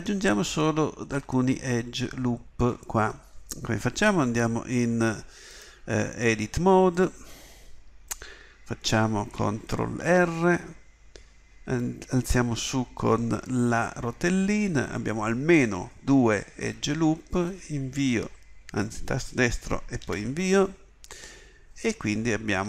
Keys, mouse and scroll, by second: 10.0 ctrl+r.